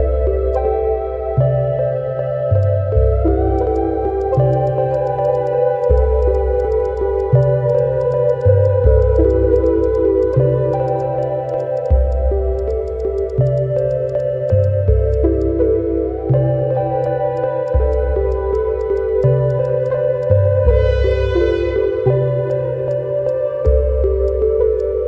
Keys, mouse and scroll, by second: 0.4 alt+middle click, 0.5 alt+click, 2.5 alt+middle click, 2.6 alt+click, 2.8-3.3 scroll up 2, 3.0 alt+middle click, 3.3 alt+middle click, 3.6 shift+click, 3.7 shift+click, 4.6 shift+click, 5.0 shift+click, 5.4 alt+click, 5.9 shift+click, 6.3 shift+click, 6.7 shift+click, 6.9 shift+click, 7.4 shift+click, 7.8 shift+click, 8.4 shift+click, 9.1 shift+click, 9.9 shift+click, 10.3 shift+click, 11.0 shift+click, 11.2 shift+click, 11.6 shift+click, 11.8 shift+click, 12.0 alt+middle click, 12.1 alt+click, 13.0 shift+click, 13.5 shift+click, 13.9 shift+click, 14.5 shift+click, 14.6 shift+click, 14.7 scroll down 1, 14.9 alt+middle click, 15.1 alt+click, 16.1 Tab, 17.0 alt+click, 19.8 alt+click, 19.8 alt+click, 20.0 ctrl+z, 20.2 shift+click, 21.5 shift+middle click, 21.8 Tab, 22.5 alt+click, 23.6 shift+click, 23.8 ctrl+z, 24.2 shift+click, 24.8 alt+click.